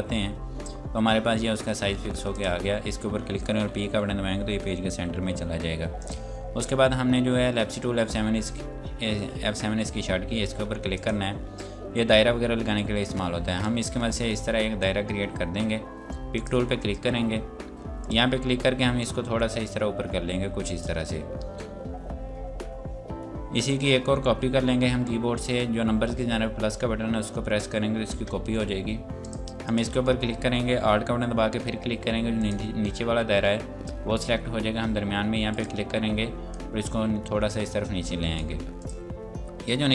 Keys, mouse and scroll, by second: 2.3 click, 3.9 p, 6.0 click, 11.0 click, 13.6 click, 28.2 KP_Add, 29.2 click, 32.4 click, 35.5 click.